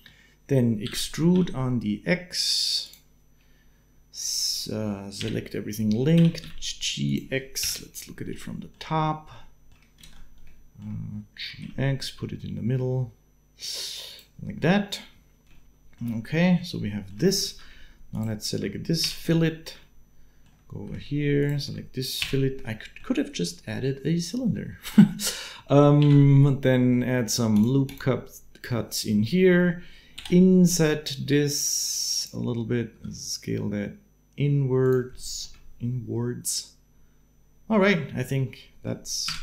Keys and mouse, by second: 0.6 e, 5.0 l, 5.9 g, 7.4 KP_7, 8.2 shift+click, 9.2 shift+click, 9.8 ctrl+space, 11.2 g, 15.4-17.1 shift+middle drag, 17.2 alt+a, 18.8 f, 20.5 alt+a, 21.2 alt+shift+middle click, 22.0 f, 22.5-23.5 shift+middle drag, 24.3 shift+click, 25.8 ctrl+r, 29.9 i, 32.7 s, 36.6-38.6 middle drag, 39.0 Tab.